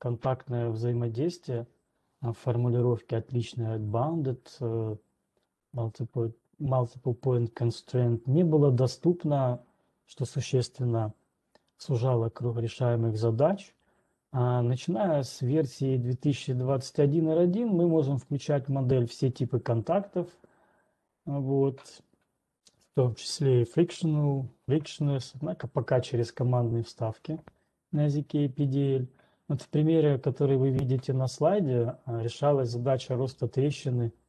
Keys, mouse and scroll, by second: 16.1-18.1 scroll down 3, 18.1-18.6 scroll down 2.